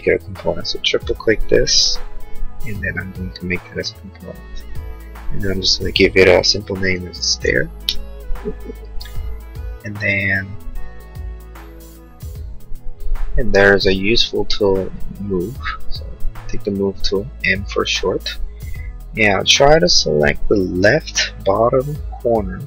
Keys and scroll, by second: 7.8 Return.